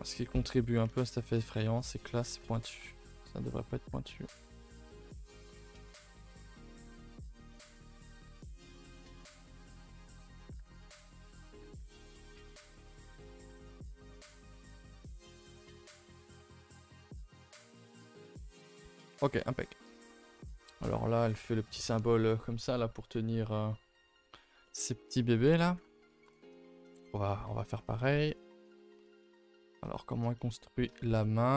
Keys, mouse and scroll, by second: 0.1 click, 0.6 middle click, 0.9 2, 1.1 click, 1.4 middle click, 2.1 g, 3.4 click, 3.8 g, 5.4 middle click, 5.9 click, 6.3 g, 7.5 click, 7.8 g, 8.4 click, 8.7 middle click, 9.1 g, 10.5 g, 11.4 click, 11.6 g, 12.3 click, 12.5 g, 13.9 scroll down 2, 14.1 middle click, 14.6 Tab, 14.7 middle click, 15.6 click, 15.9 a, 16.0 a, 16.1 middle click, 16.4-18.0 scroll down 7, 16.5 ctrl+s, 16.9 middle click, 17.4 middle click, 18.0-19.3 middle drag, 19.3-19.6 scroll up 2, 19.6-20.1 shift+middle drag, 20.1-20.7 scroll up 1, 20.7 scroll up 1, 23.9-24.3 scroll down 1, 24.3-24.6 scroll up 1, 24.6 shift+middle click, 25.1 a, 25.2 a, 25.6 ctrl+s, 26.2 click, 26.6 shift+middle click, 26.9-27.4 scroll up 1, 27.4 Tab, 28.3 click, 29.0 middle click, 29.9 scroll down 1, 30.1-31.5 shift+middle drag, 31.5 scroll up 1.